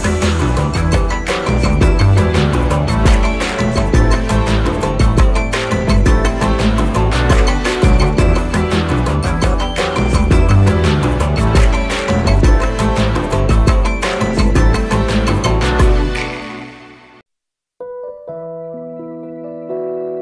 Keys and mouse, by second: 0.3 click, 0.8-1.9 alt+shift+click, 2.3 click, 5.4 click, 6.4 i, 7.8 click, 9.5-12.7 drag, 11.1-12.3 drag, 12.7 right click, 14.9 click, 17.4 click, 17.9-19.4 drag.